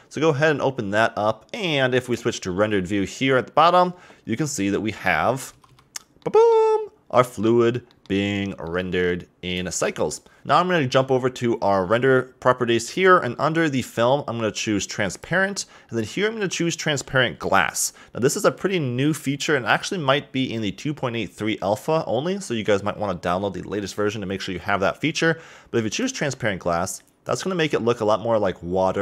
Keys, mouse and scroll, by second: 0.7-1.8 scroll down 1, 3.0 click, 5.5 a, 5.7 a, 6.2-9.6 middle drag, 10.9-13.3 middle drag, 13.8 click, 15.1 click, 25.9 click.